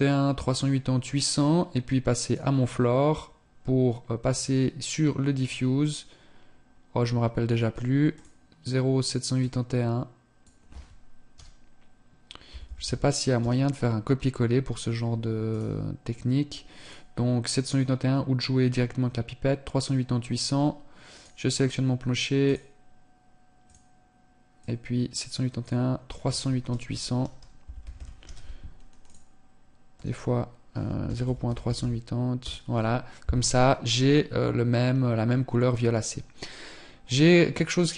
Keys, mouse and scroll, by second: 1.8 right click, 3.8 click, 4.8 click, 15.2 right click, 16.2 click, 20.8 right click, 21.7 click, 26.8 BackSpace, 27.6 KP_0.